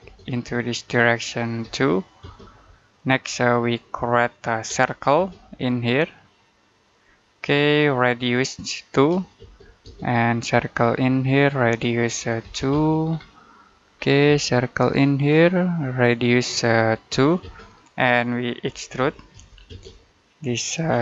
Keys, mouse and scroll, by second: 1.5 2, 2.1 space, 3.1-4.6 scroll up 1, 4.6 c, 5.0 space, 6.8 click, 8.8 2, 9.2 space, 11.2 click, 12.3 2, 12.6 space, 12.9-13.3 scroll down 1, 13.3 middle click, 13.7-14.1 scroll up 1, 14.1 space, 16.0 click, 17.0-19.7 typing, 20.5 click, 20.8-21.0 scroll down 1.